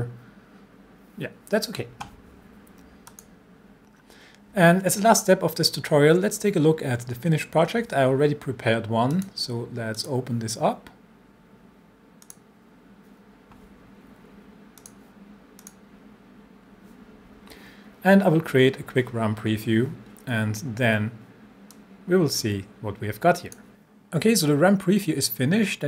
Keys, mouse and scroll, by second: 3.1 click, 9.1 click, 12.2 click, 14.8 click, 21.7-23.6 drag.